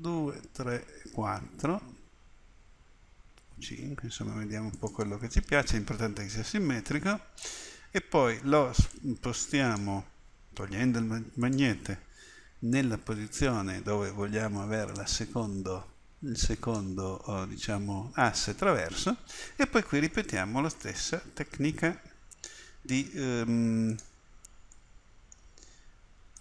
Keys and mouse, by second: 8.9-11.1 drag, 11.4-20.4 drag, 23.9-26.1 drag.